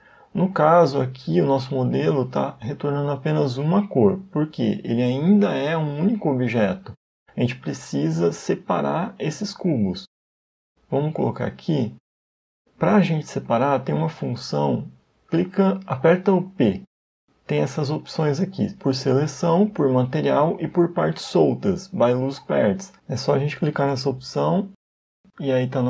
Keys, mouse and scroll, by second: 6.0 right click, 7.0 Tab.